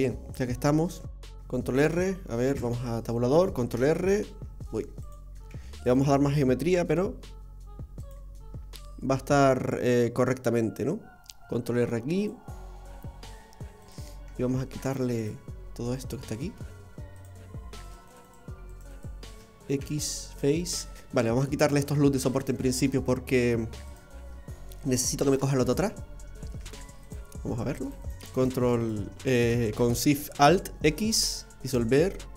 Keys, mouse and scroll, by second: 0.1 middle click, 0.4-1.1 scroll down 1, 1.7 ctrl+r, 2.5 Tab.